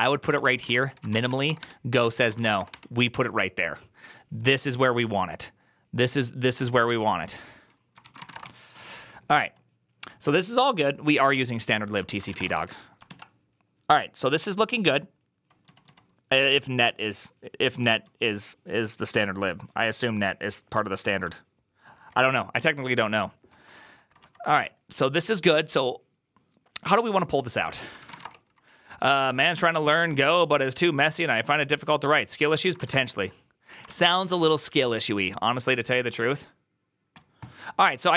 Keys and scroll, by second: 0.0-2.5 typing, 2.4 Return, 7.8-12.6 typing, 12.9 ctrl+u, 14.4-15.7 typing, 17.6-21.8 typing, 23.4 k, 23.6 k, 24.1 k, 24.3 ctrl+u, 27.7-28.5 typing, 32.4-34.1 typing, 33.7 ctrl+c, 34.2 Return, 37.9-38.1 typing.